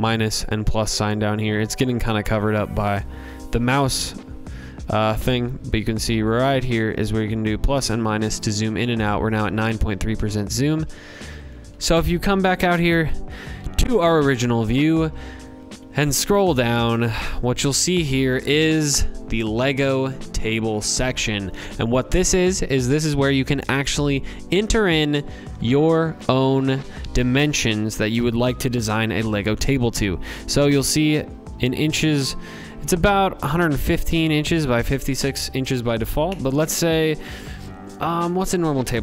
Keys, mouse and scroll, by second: 8.9-10.1 scroll, 13.6 scroll, 14.6 v, 15.0-16.8 scroll, 26.6 click, 29.8 click, 31.0 click, 34.1 click.